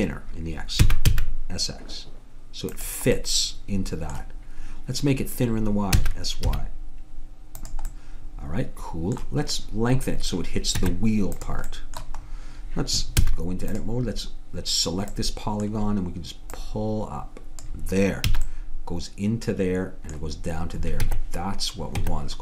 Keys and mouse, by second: 0.9 s, 3.2 middle click, 6.0 s, 10.8 Tab, 13.2 a, 13.8-15.6 drag, 16.6-18.3 drag, 18.3 a, 18.7-20.2 middle drag, 21.0 Tab, 22.0 Tab.